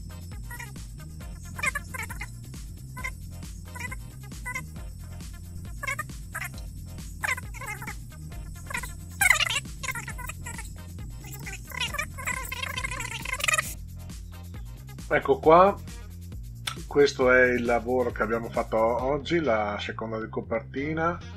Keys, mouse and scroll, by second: 0.0 click, 0.5 click, 0.7 click, 1.4 click, 2.5 click, 2.7 click, 3.3 click, 4.0 click, 4.7 click, 5.0 click, 5.3 click, 5.7 click, 5.9 click, 6.1 click, 6.3 click, 6.7 click, 7.2 click, 7.5 click, 8.2 click, 8.6 click, 8.9 click, 9.1 click, 9.8 click, 10.2 click, 10.9 click, 11.4 click, 13.4 scroll down 2.